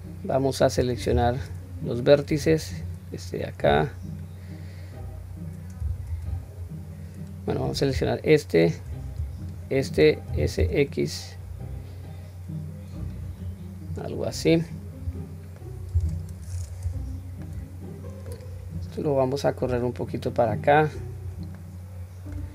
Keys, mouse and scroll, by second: 1.1 1, 2.4 click, 3.6-5.9 drag, 6.1 ctrl+z, 7.5 click, 9.4 shift+click, 10.3 s, 13.6-14.0 scroll down 1, 14.0-15.6 middle drag, 16.0 Tab, 16.8 /, 17.4-18.2 middle drag, 18.5-19.0 scroll down 1, 19.7 click, 21.5-22.4 middle drag.